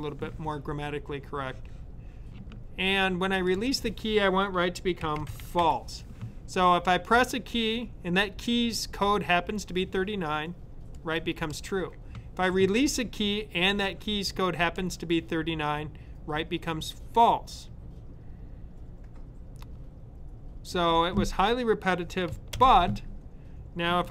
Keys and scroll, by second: 4.7-6.0 typing.